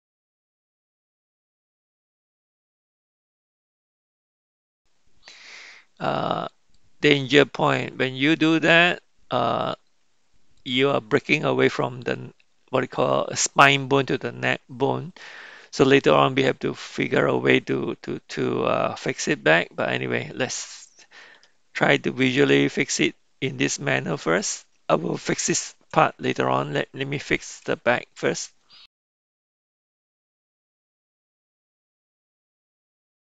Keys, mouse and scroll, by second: 2.7 click, 4.1 r, 21.3 g, 26.5 shift+middle click, 27.0 shift+right click, 28.9 KP_1, 29.2 click, 29.6 r, 30.0 click, 30.5 r, 32.5-33.2 typing, 33.1 click.